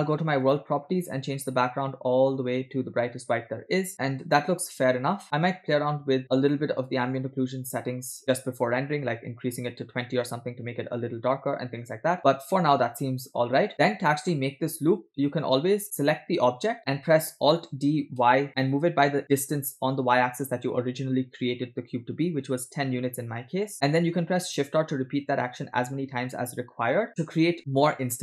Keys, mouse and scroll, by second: 0.5 click, 1.5 click, 6.3 click, 8.2-10.0 drag, 12.2 shift+middle click, 13.2 middle click, 13.7-14.2 scroll down 3, 14.8-15.8 middle drag, 16.3 click, 18.5 alt+d, 27.6-28.2 middle drag.